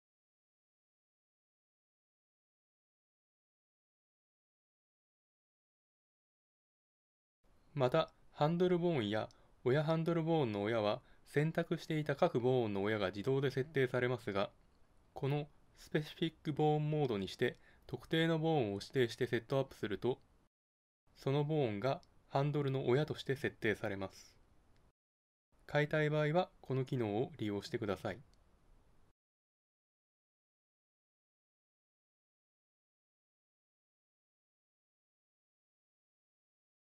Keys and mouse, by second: 0.4 ctrl+n, 6.1-7.6 drag, 7.6-8.7 middle drag, 8.7 [, 11.7 ctrl+space, 15.3-16.7 drag, 16.7 shift+d, 26.8 Tab, 27.4 right click, 28.1 g, 30.9 click, 31.9 [.